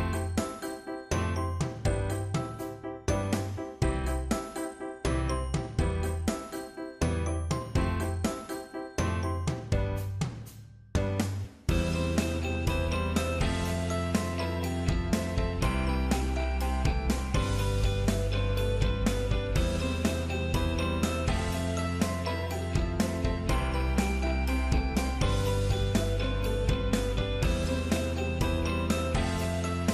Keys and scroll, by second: 19.5 ctrl+z.